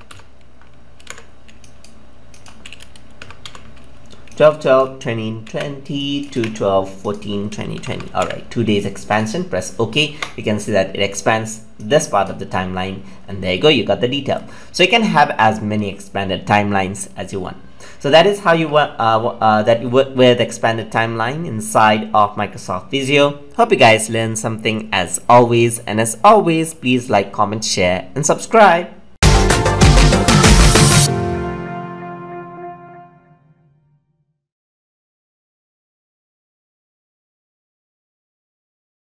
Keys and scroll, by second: 5.4 ctrl+c, 6.3 ctrl+v.